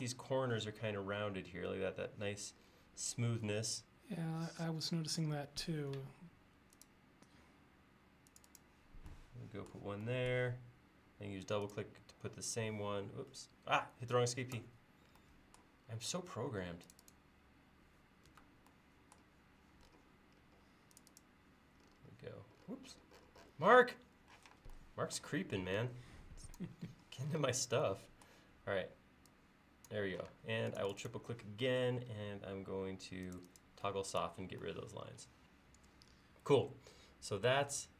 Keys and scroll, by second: 5.4 a, 13.2 Escape, 18.4 Escape, 24.4 p, 30.4 space.